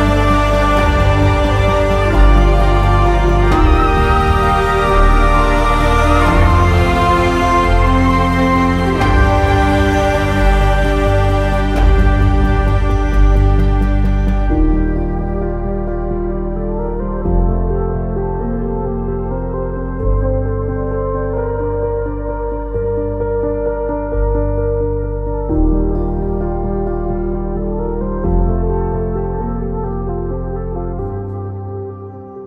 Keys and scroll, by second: 10.8 q, 29.0 w, 30.5 e.